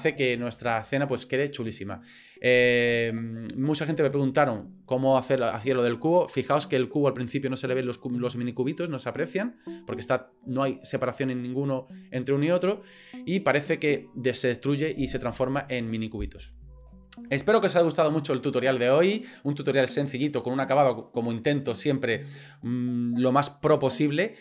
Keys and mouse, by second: 5.1 click, 6.5 click, 12.6 click, 19.6 middle click.